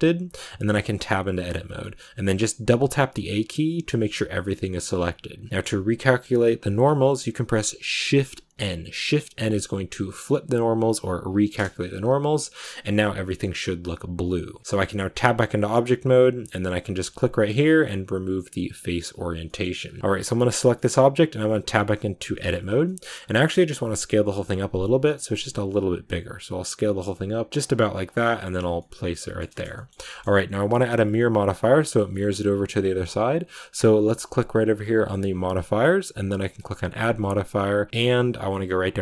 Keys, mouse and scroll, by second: 0.3-0.7 scroll down 1, 0.7 Tab, 5.5-19.5 middle drag, 19.5-20.0 scroll up 4, 19.7 middle click, 20.0-22.7 middle drag, 22.7-23.2 scroll up 2, 22.7 middle click, 23.2-28.0 middle drag, 28.0 scroll down 2, 28.3-30.5 middle drag, 30.5-34.7 right drag, 34.7-39.0 drag.